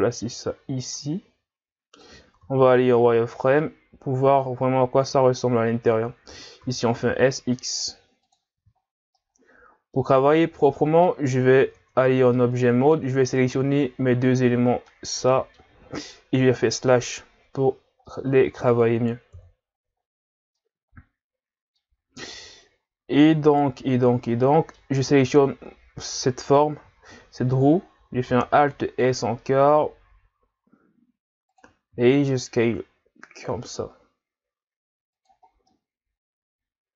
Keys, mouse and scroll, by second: 2.5 z, 2.8-3.6 scroll up 2, 3.6 click, 6.6 s, 8.6 z, 8.8-9.2 scroll down 2, 9.2-10.3 middle drag, 10.3-10.7 scroll down 4, 10.7 middle click, 11.3-11.7 scroll up 3, 11.7 Tab, 12.4-13.3 middle drag, 13.3 shift+right click, 14.9-16.4 middle drag, 16.4 KP_Divide, 17.6-18.1 scroll down 1, 18.1-19.3 middle drag, 19.3 KP_3, 20.6-22.0 middle drag, 22.0-22.6 scroll up 3, 23.4 right click, 24.4-25.3 middle drag, 25.3 Tab, 28.3 alt+s, 31.9 s, 35.5 scroll down 1, 35.7-36.9 middle drag.